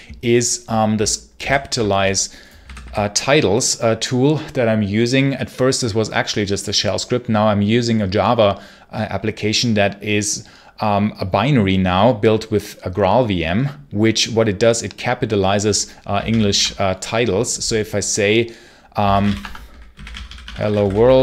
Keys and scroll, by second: 1.3 ctrl+super+h, 2.5 g, 16.2 ctrl+super+l, 18.6-21.2 typing.